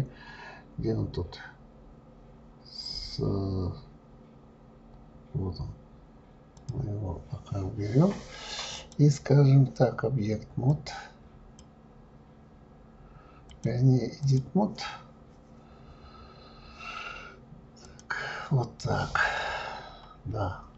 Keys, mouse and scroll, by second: 4.4 scroll down 1, 5.2 scroll down 3, 5.7 scroll down 1, 6.5 click, 8.7-11.6 drag, 13.5-16.5 drag, 17.8 click, 18.8-19.4 scroll up 5, 20.5-20.7 scroll up 1.